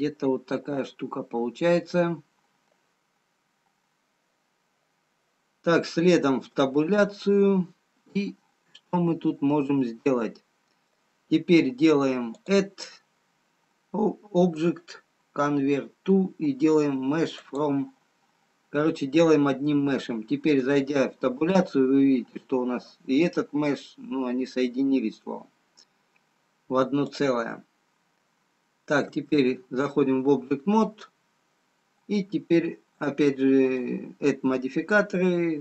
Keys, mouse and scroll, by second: 0.3 middle click, 0.3-1.6 scroll down 1, 1.6-2.2 scroll down 4, 2.2 middle click, 2.2-2.9 scroll down 1, 6.7 Tab, 10.5 middle click, 12.4 click, 18.8-19.3 scroll up 1, 20.6 Tab, 21.9-22.3 scroll up 6, 23.0-23.3 scroll up 4, 26.5-27.7 scroll down 8, 27.7 click, 27.7-29.1 scroll down 1, 29.1 Tab, 33.8 click.